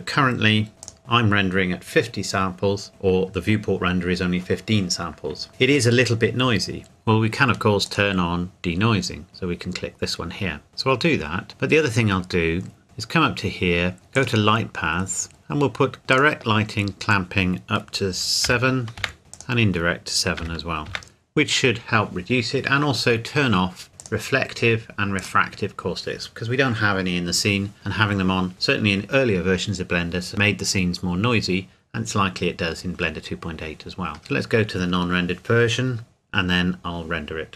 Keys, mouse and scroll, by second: 0.8 click, 6.8 click, 10.7 click, 12.8 click, 14.1 click, 14.9 scroll down 1, 16.1 click, 18.4 KP_7, 19.0 KP_Enter, 21.0 KP_7, 21.1 KP_Enter, 24.1 click, 34.2 click.